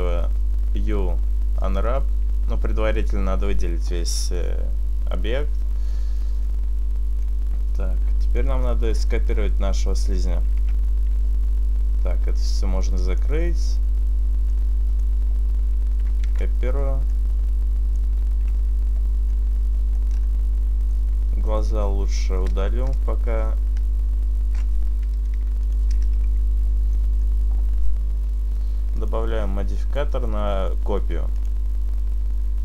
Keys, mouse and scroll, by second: 13.3 click, 14.6 click, 16.3 shift+d, 17.2 right click, 17.2 click, 18.6 Tab, 19.4 middle click, 20.0 scroll up 4, 20.9 right click, 21.6 shift+right click, 23.0-25.3 ctrl+KP_Add, 25.3 Delete, 26.4 Tab, 26.6 scroll down 3, 26.8 middle click, 30.6 click, 31.4 click.